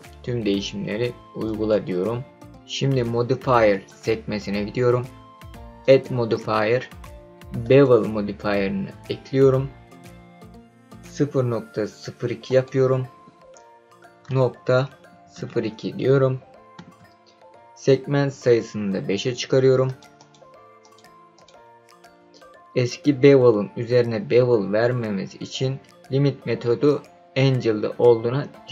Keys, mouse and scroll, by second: 3.7 click, 5.8-7.9 drag, 12.4-16.7 drag, 19.8 click, 20.1 click, 20.8 click, 21.3 click.